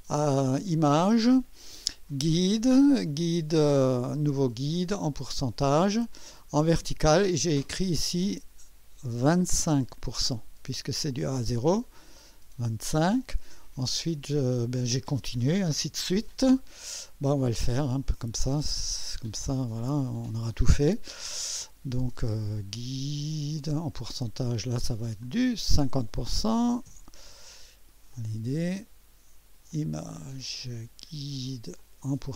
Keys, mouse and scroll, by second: 0.7 click, 5.1 click, 7.5 click, 9.4 2, 9.6 5, 12.2 click, 17.8 click, 23.6 click, 25.2 click, 26.3-27.2 typing, 28.2 click, 29.7 click, 31.8 click.